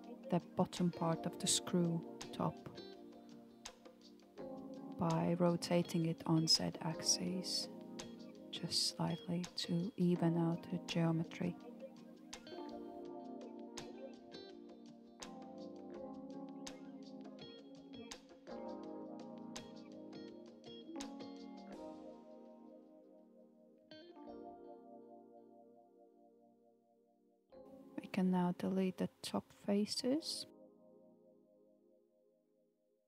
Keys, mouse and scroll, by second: 0.3 alt+click, 3.3 KP_1, 5.1 s, 7.1 r, 15.9-17.3 shift+middle drag, 17.3 click, 18.0-19.5 shift+middle drag, 19.5 alt+z, 20.2 alt+z, 21.3 Tab, 26.2 Tab, 27.0-29.0 middle drag, 29.3-30.1 drag, 32.1 Delete.